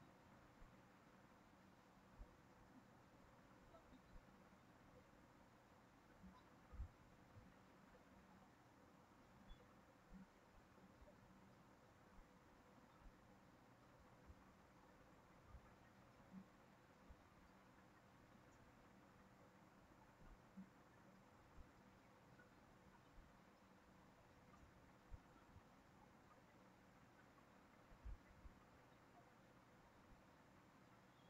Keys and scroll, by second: 2.4 ctrl+c, 2.6 ctrl+v, 25.9 ctrl+c, 26.1 ctrl+v.